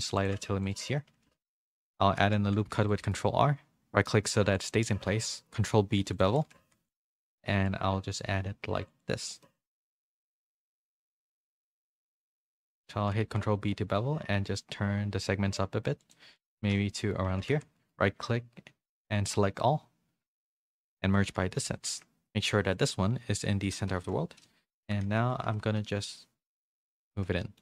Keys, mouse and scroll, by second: 0.5 ctrl+r, 1.2 ctrl+b, 2.2 ctrl+z, 2.7 ctrl+r, 5.1 ctrl+b, 6.2 a, 6.6 a, 6.6 c, 7.5 e, 9.1 z, 9.4 middle click, 9.9 2, 10.8 middle click, 11.3 click, 12.0 middle click, 12.6 ctrl+b, 16.4 middle click, 17.3 1, 17.5 a, 20.8 middle click, 22.7 Tab, 22.7-24.2 drag, 25.0 Tab, 25.0 a, 25.4 s, 27.1 Tab, 27.4 middle click.